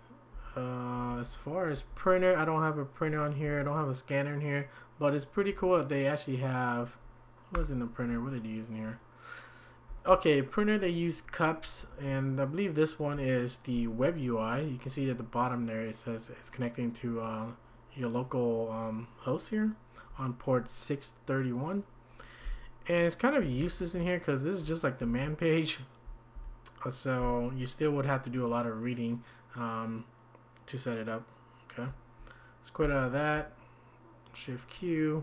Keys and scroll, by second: 1.2-1.7 typing, 3.4 typing, 5.5 typing, 7.5 typing, 9.9 Down, 11.6 Down, 11.9 Down, 23.4 Down, 24.3 typing, 24.5 Down, 24.6 Down, 25.0 Down, 25.2 Up, 25.5 typing, 25.7 Up, 25.8 Up, 25.9 Up, 26.0 Up, 26.3 Up, 28.3 typing, 32.8 q.